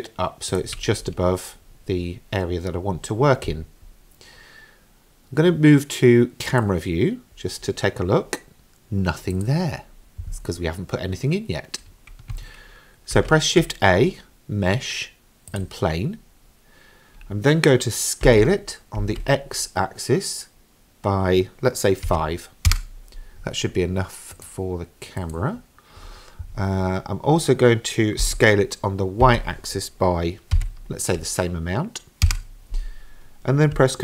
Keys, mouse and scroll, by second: 6.5 click, 9.3 click, 13.1 shift+a, 18.3 s, 24.4 click, 25.2 click, 28.2 s.